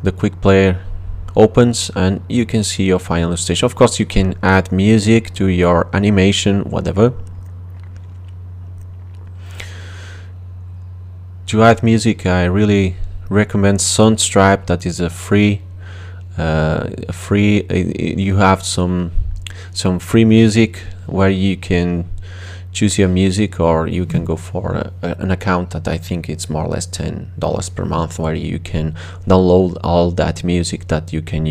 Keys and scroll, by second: 21.6-23.3 typing.